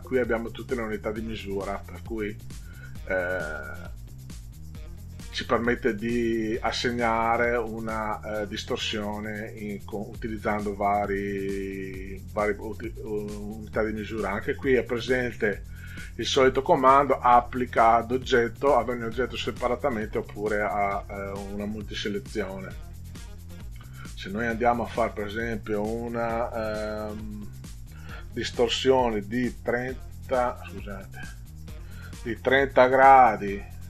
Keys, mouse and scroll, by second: 3.6 click, 29.1 3, 30.7 click, 31.2 click, 32.3 3, 32.8 0.